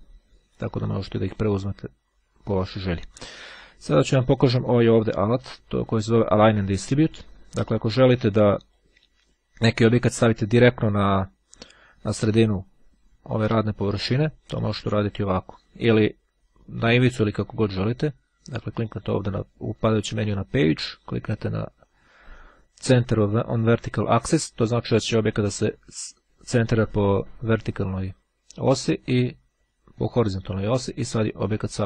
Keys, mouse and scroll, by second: 1.2 click, 7.9-9.3 drag, 15.7 click, 18.7 click, 19.6-20.7 drag, 22.3-23.7 drag, 29.5-30.7 drag.